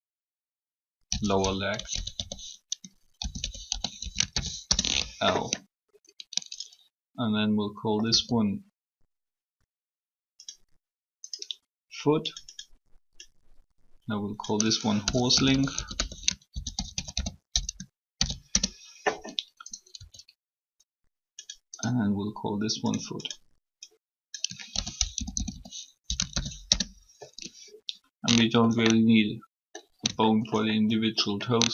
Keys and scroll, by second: 0.8 typing, 2.6-4.7 typing, 8.0 e, 14.9-18.6 typing, 19.9 e, 24.6-25.8 typing, 26.6 Return.